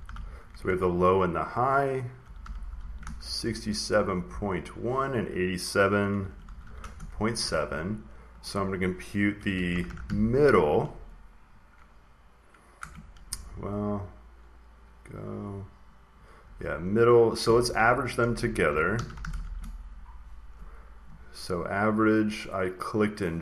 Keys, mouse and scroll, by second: 0.0-3.2 typing, 0.7 Up, 0.7 Right, 5.7-7.0 typing, 8.3-10.4 drag, 9.0-10.5 typing, 12.7 typing, 13.1 Left, 16.3 Right, 17.3 Right, 17.4-19.8 typing, 21.3 typing, 22.9-23.4 drag.